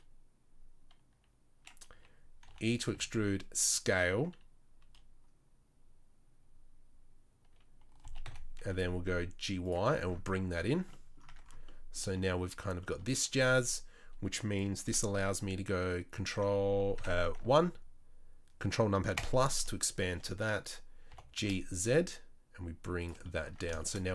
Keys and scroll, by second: 2.4 e, 2.9 s, 8.0 g, 10.7 Tab, 11.3 Tab, 17.0 1, 21.1 g, 23.4 Tab.